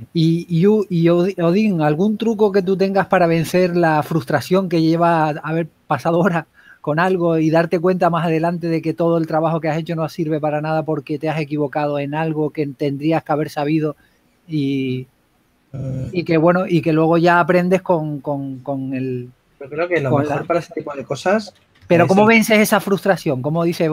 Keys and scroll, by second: 2.4 typing, 9.9-10.7 typing, 12.8 super+z, 13.7-16.6 typing, 17.9 typing, 23.1 s.